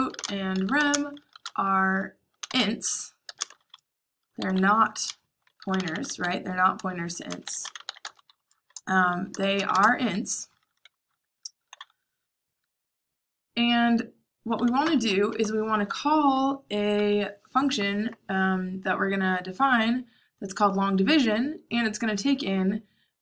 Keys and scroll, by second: 0.0-10.0 typing, 11.7-12.8 typing, 14.3-15.7 typing.